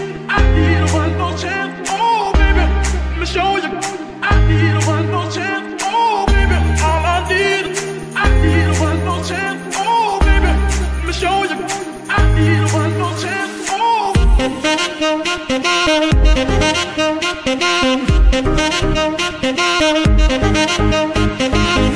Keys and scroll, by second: 20.5 g.